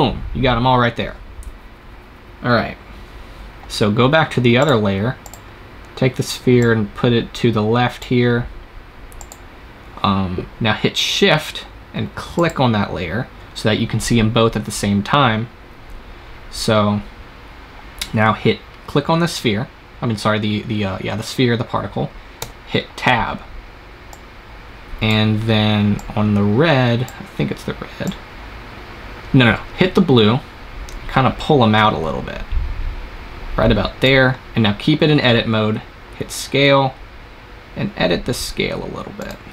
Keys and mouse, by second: 4.5-8.3 drag, 9.0-10.8 drag, 12.2-15.3 drag, 22.3 Tab, 24.0-30.1 drag, 36.0 s, 39.3 click.